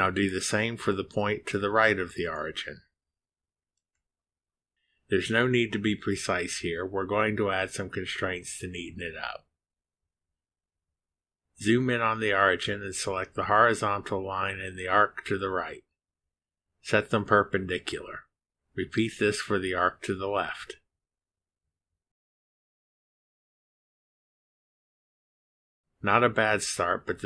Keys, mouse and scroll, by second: 2.1 click, 3.8 click, 8.1 click, 9.2 click, 11.8-12.9 scroll up 6, 13.2 click, 13.9 click, 17.1 click, 18.5 click, 19.6 click, 20.1 click, 20.9 click, 21.8 click, 22.7 click, 23.6 click, 24.8-25.4 scroll down 2.